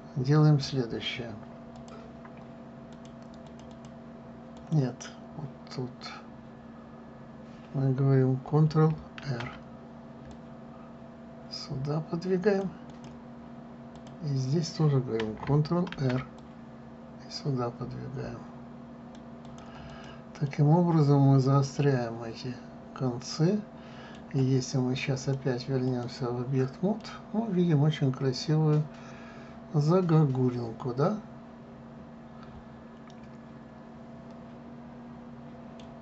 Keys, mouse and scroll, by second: 0.1 click, 2.4 click, 3.5 click, 4.1 click, 4.4 click, 5.2 click, 9.9 ctrl+r, 13.5 click, 14.6 click, 16.6 ctrl+r, 20.6 click, 21.2-24.1 middle drag, 25.9-27.7 drag, 27.7-30.7 middle drag.